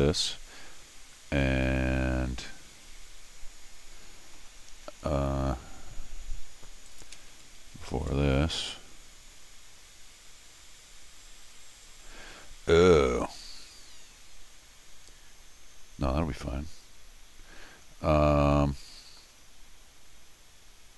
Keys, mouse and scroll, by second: 6.9 click, 7.9 ctrl+alt+r, 13.6 middle click, 18.5 middle click.